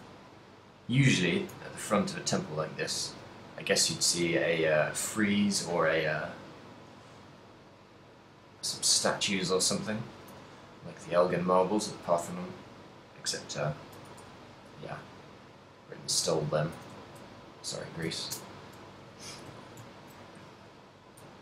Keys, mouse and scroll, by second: 2.9 ctrl+click, 3.2 middle click, 4.5 shift+d, 8.9 click, 8.9 shift+middle click, 9.5 middle click, 10.3 g, 11.5 click, 11.9 g, 13.0 click, 13.9 g, 15.2 click, 15.4 middle click, 16.5 middle click, 16.9 a, 17.0 middle click, 18.4 ctrl+middle click, 18.8 middle click, 19.2 ctrl+middle click, 19.8 shift+middle click, 20.2 ctrl+middle click, 20.8 middle click.